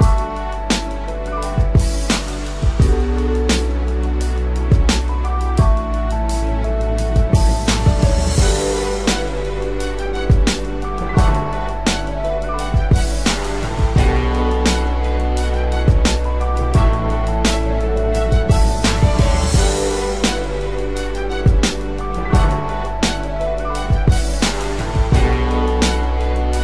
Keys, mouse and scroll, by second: 0.4 double click, 1.6-3.3 typing, 9.5 ctrl+=, 10.0 space, 11.3 ctrl+t, 12.3 ctrl+click, 13.6 ctrl+click, 15.4 Return, 20.3 ctrl+-, 20.5 ctrl+-, 23.7 double click.